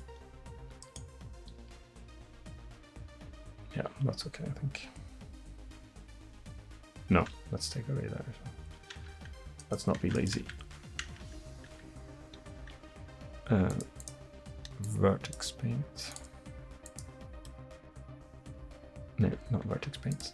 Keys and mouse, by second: 0.9-4.8 right drag, 1.6 r, 9.0 Tab, 9.6-11.6 right drag, 10.1 Tab, 10.5 Tab, 11.1 Tab, 11.6 Tab, 12.8 Tab, 13.3 Tab, 14.9 Tab, 17.2-18.9 drag, 19.3 Tab, 19.9 Tab.